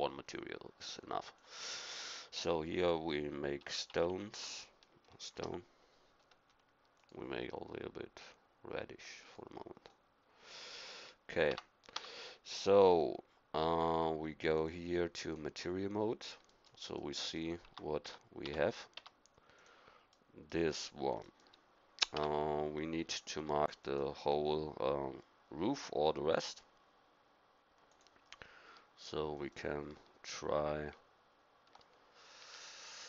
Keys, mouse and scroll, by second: 6.9-9.4 drag, 11.4 Tab, 11.9 Tab, 14.5-15.6 drag, 16.4 middle click, 17.6 Tab, 18.0 Tab, 18.4 Tab, 18.9 Tab, 22.1 Tab, 32.4 a.